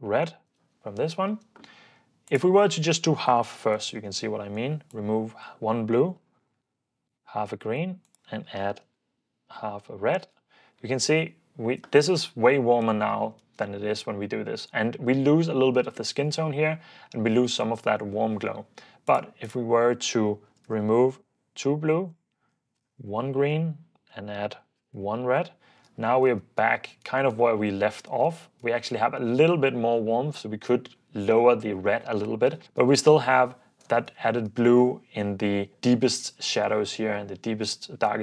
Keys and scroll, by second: 0.0-0.5 typing, 2.5-4.2 typing, 5.9-7.1 typing, 8.7-10.4 typing, 11.1 super+d, 13.4 super+d, 20.6-21.4 typing, 22.6-25.8 typing, 25.9 super+f, 26.4 super+d, 27.2 super+d, 28.4 super+d, 32.6 super+d, 33.2 Escape, 34.2 super+d.